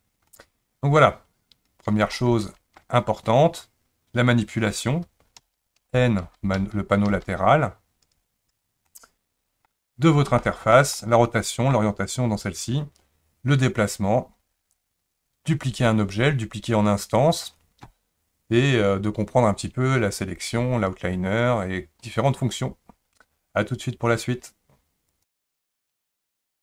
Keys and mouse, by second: 0.3-1.0 middle drag, 2.2-2.8 shift+middle drag, 5.4-7.1 typing, 8.9-9.7 middle drag, 10.4-10.7 shift+middle drag, 10.9 middle click.